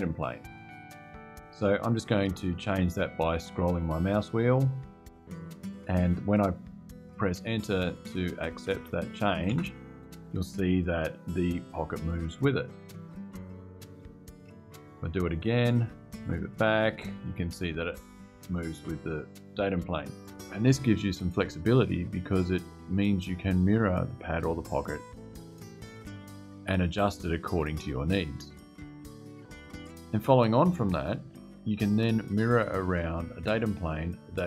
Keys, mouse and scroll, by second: 1.3 click, 4.3-4.7 scroll down 2, 4.9-5.2 scroll down 2, 9.2 KP_Enter, 12.4 click, 13.3-13.8 scroll up 4, 14.6 scroll up 2, 15.9 Return, 20.0 click.